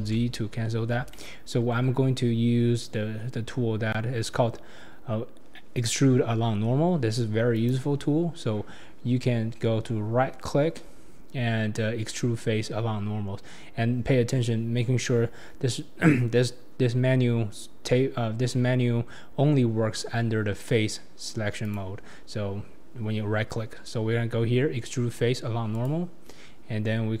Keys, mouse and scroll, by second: 0.0 ctrl+z, 1.1-7.5 shift+middle drag, 7.5 right click, 21.6-24.7 right drag.